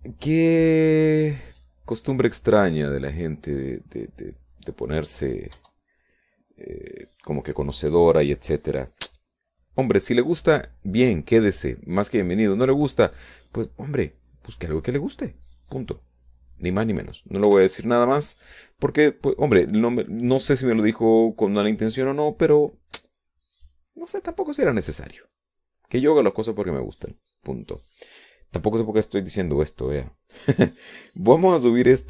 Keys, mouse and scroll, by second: 2.0 scroll down 1, 2.3 middle click, 2.4-3.9 drag, 3.9 middle click, 4.1 scroll up 1, 4.3 middle click, 4.4-6.2 drag, 8.3 KP_1, 13.1-14.5 middle drag, 14.5 click, 15.3 middle click, 15.4 click, 16.8-19.7 drag, 20.2 KP_1, 21.0 click, 21.1 middle click, 21.7-22.1 scroll down 1, 22.1-24.3 middle drag, 27.1 middle click, 27.9-28.6 scroll down 2, 28.8-30.0 middle drag.